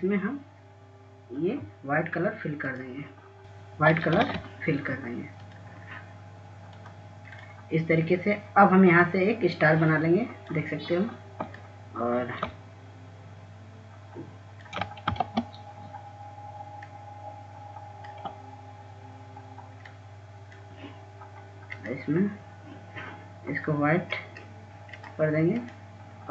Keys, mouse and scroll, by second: 1.8 click, 6.2 ctrl+a, 7.4 click, 11.5-13.4 drag, 13.7-17.0 shift+drag, 17.3 ctrl+space, 17.8-18.3 scroll up 1, 18.9 click, 22.0 shift+click.